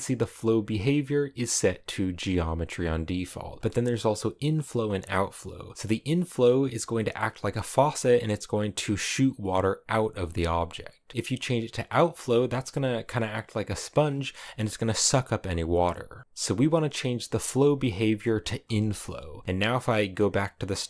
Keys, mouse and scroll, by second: 3.3 click, 3.6-6.8 scroll down 1, 6.8 click, 9.9-18.4 middle drag, 18.4-20.8 drag.